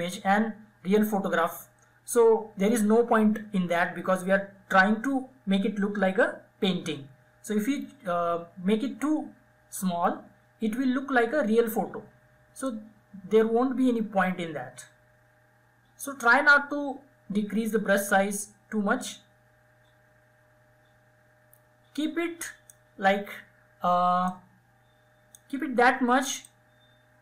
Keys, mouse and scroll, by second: 11.7-21.8 drag, 23.4-27.2 drag.